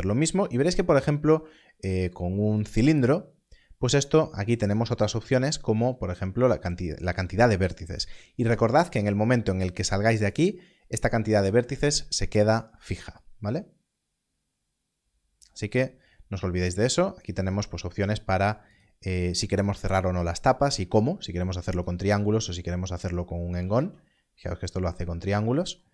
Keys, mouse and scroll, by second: 2.5 click, 13.1 click, 18.7 click, 24.2 Tab.